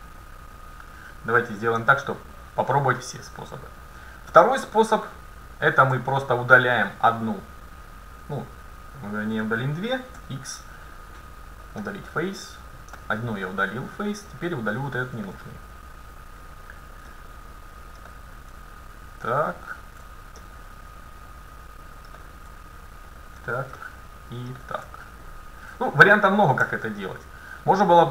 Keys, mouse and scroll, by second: 2.0-4.0 middle drag, 5.3-10.5 right drag, 10.2 x, 13.0 middle click, 16.3-18.1 right drag, 17.2-18.9 middle drag, 19.0-21.0 right drag, 20.5 middle click, 21.9 middle click, 23.0-24.9 right drag, 23.8-25.7 middle drag, 25.3-27.3 right drag, 26.7 x.